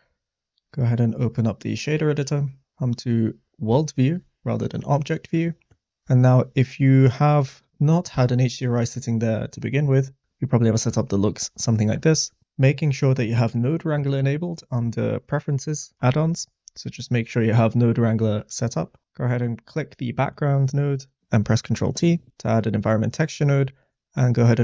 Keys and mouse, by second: 1.2-2.4 drag, 2.7-4.2 drag, 5.3 middle click, 6.1 click, 7.4 click, 8.1 x, 8.8 middle click, 9.7 click, 10.0 click, 10.7 middle click, 12.6 middle click, 13.9-15.0 drag, 19.6 click, 21.2 ctrl+t, 21.5 middle click, 24.5 click.